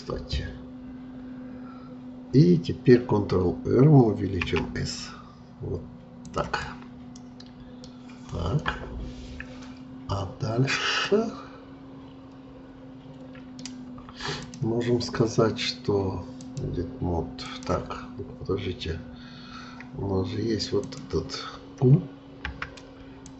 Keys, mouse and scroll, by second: 4.4 s, 6.6-9.6 middle drag, 11.0-14.0 middle drag, 14.4-19.4 drag, 20.8-22.4 drag, 22.4 q.